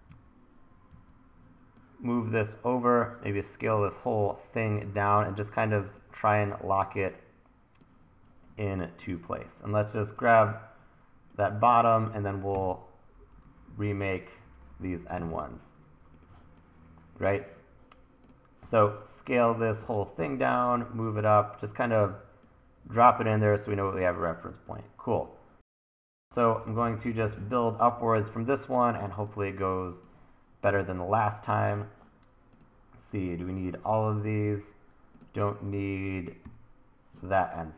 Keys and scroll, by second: 0.1 w, 6.5 t, 12.5 Delete, 13.5 super+z, 15.2 Delete, 16.3 t, 18.7 t, 19.6 t, 20.1 e, 33.9 Delete, 34.5 super+z, 36.4 Delete.